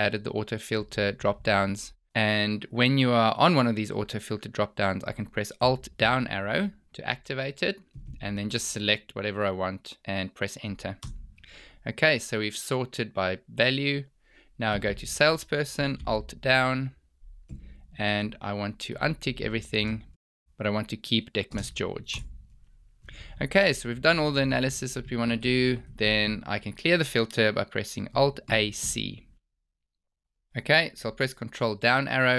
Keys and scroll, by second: 6.0 alt+Down, 16.0 alt+Down, 17.8 Down, 17.9 Down, 18.1 Down, 18.2 Down, 18.3 Down, 19.5 space, 22.2 Return, 28.3 alt+a, 28.6 c.